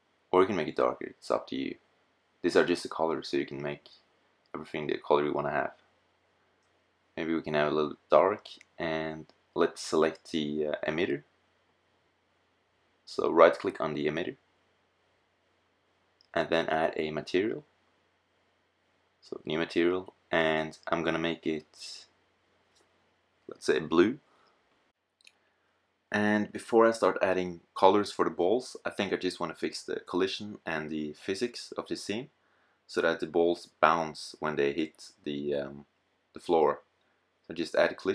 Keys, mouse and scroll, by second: 0.5 middle click, 1.0 middle click, 1.1 middle click, 2.4 middle click, 5.8-8.5 middle drag, 10.2 KP_0, 15.1 middle click, 17.0-18.2 middle drag, 22.5 middle click, 23.9 middle click, 32.6-34.0 middle drag, 35.8-36.2 middle drag.